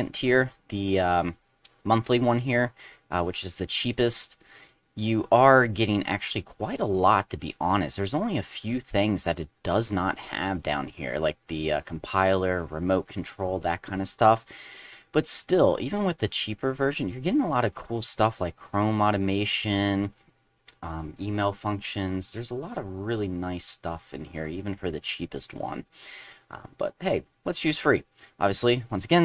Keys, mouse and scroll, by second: 0.3 middle click, 1.1 middle click, 4.6 middle click, 5.8-7.5 middle drag, 8.9-10.3 drag, 10.8 click, 17.7 click, 18.8 middle click, 20.6 scroll down 2, 21.3 click, 25.0 middle click, 25.0 scroll down 1, 25.5 middle click, 25.5-26.5 scroll down 1, 28.9 click.